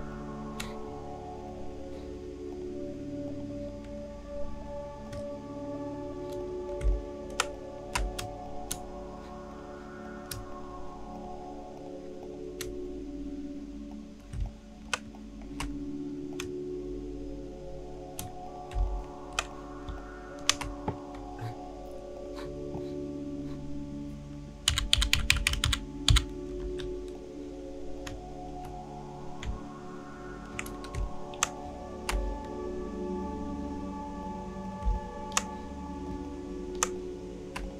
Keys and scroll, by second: 6.8 shift+space, 14.3 space, 18.7 space, 24.7 Down, 25.0 Down, 25.2 Down, 25.3 Down, 25.5 Down, 25.7 Down, 26.1 Down, 26.6 v, 31.0 space, 34.8 space.